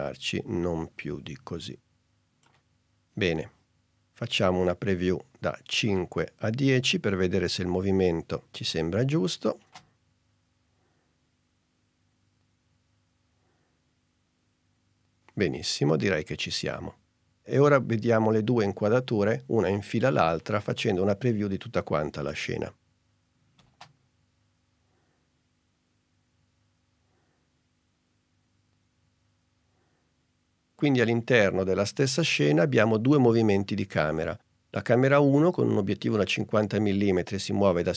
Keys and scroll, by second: 9.7 space, 23.7 space.